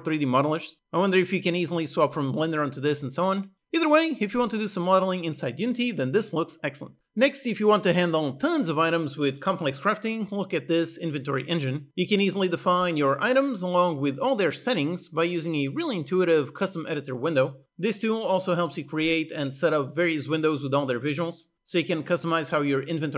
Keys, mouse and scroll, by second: 0.1 ctrl+z, 0.5 ctrl+z, 0.6-3.1 typing, 1.3-2.4 click, 1.7 click, 2.0 click, 2.5 ctrl+alt+z, 2.5 click, 2.6 click, 2.7 click, 3.1 click, 3.3 click, 3.5 click, 6.2 click, 6.2 e.